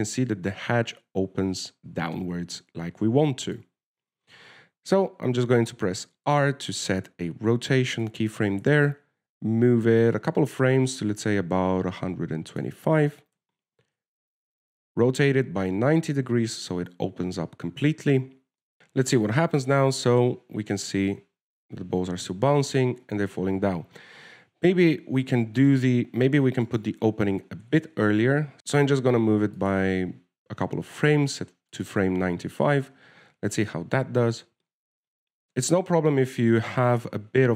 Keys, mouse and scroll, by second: 7.5 r, 9.5 click, 14.6 r, 24.8 alt+a, 27.0 right click, 28.2 shift+right click, 28.6 g, 33.0 click, 33.5 alt+a.